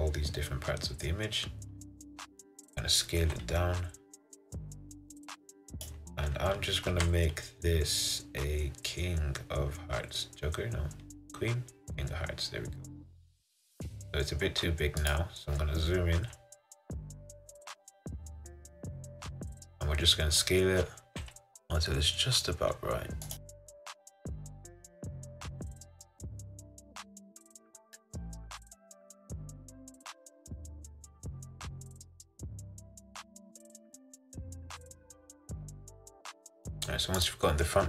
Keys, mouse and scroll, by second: 7.1 g, 21.2 s, 23.9 s, 25.2 g, 26.2 s, 28.7 click, 28.8 click, 29.2 click, 29.5 g, 31.5 s, 32.0 click, 33.7 click, 34.2 s, 34.7 g, 36.6 click.